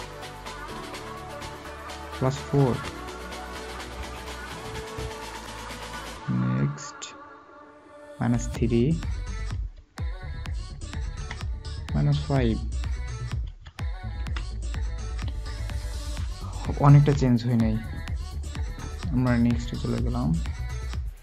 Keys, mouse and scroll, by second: 2.6 typing, 3.9 typing, 11.1 typing, 13.4-14.1 typing.